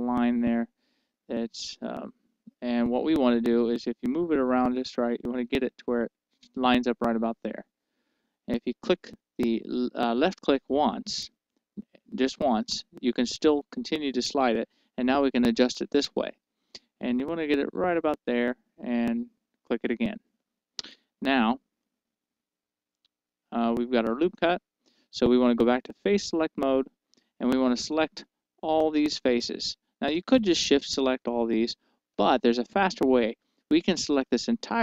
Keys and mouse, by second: 19.1-20.8 drag, 22.6-24.3 middle drag, 27.0-29.0 drag, 28.8-34.8 right drag.